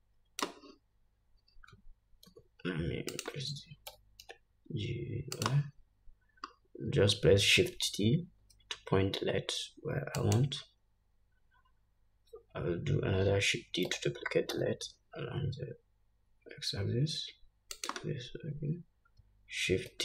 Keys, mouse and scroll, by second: 0.0-3.8 drag, 2.8 s, 4.5 g, 7.0-7.6 scroll up 2, 8.8 shift+t, 12.4 scroll down 1, 14.5 shift+d.